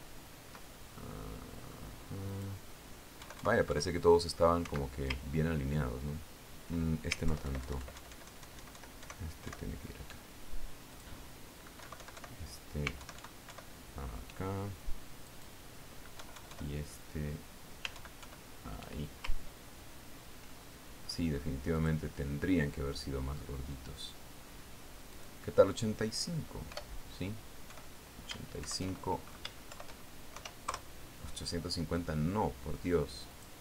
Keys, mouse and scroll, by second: 1.4 ctrl+scroll down 2, 2.2 ctrl+middle click, 2.6 click, 3.8 click, 4.7 Right, 6.8-7.2 ctrl+scroll up 2, 7.7 ctrl+scroll down 2, 8.8 alt+Left, 9.5 alt+Right, 12.4 click, 13.3 Right, 14.5 alt+Right, 16.8 click, 17.7 Right, 19.4 alt+Right, 21.1-21.6 ctrl+scroll down 2, 22.0 ctrl+click, 23.3 click, 26.6 click, 28.2 BackSpace, 29.1 KP_5, 30.1 shift+Delete, 31.2 shift+End, 31.8 shift+KP_0, 32.1 KP_Enter.